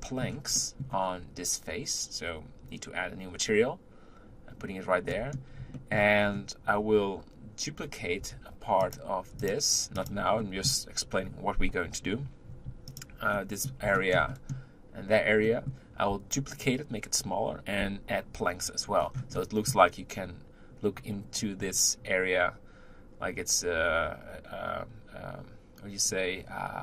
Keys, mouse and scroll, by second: 5.1-6.2 middle drag, 6.2-7.2 scroll up 1, 8.2 Tab, 8.8 click, 9.4 shift+click, 9.9 shift+click, 10.4-12.9 middle drag, 12.9 shift+click, 13.3-22.4 middle drag, 19.0-19.4 scroll down 3.